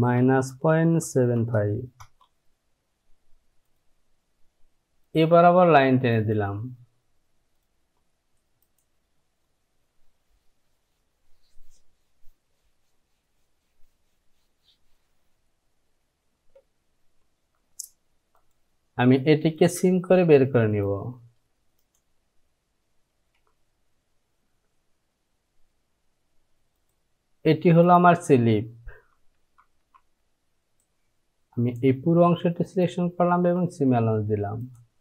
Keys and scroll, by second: 0.6 KP_Decimal, 1.1 KP_7, 23.4 j, 29.6 Down, 30.0 Down, 33.6 Down, 33.8 Down.